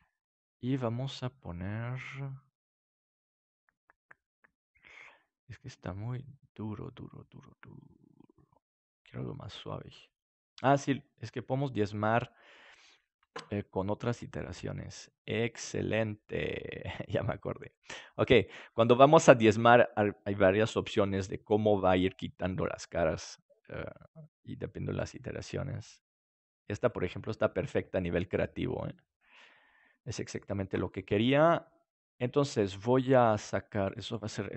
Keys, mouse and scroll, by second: 11.4-16.5 drag, 16.8-18.9 middle drag, 25.1-28.3 drag, 27.3-29.3 middle drag, 28.3 right click, 31.1-33.8 middle drag, 33.8-34.5 drag.